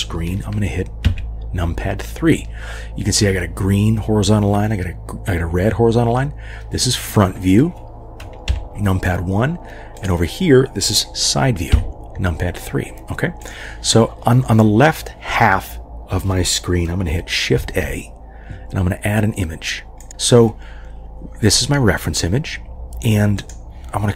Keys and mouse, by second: 1.0 KP_3, 8.5 KP_1, 11.7 KP_3, 13.4 click, 17.5 shift+a, 23.3 click.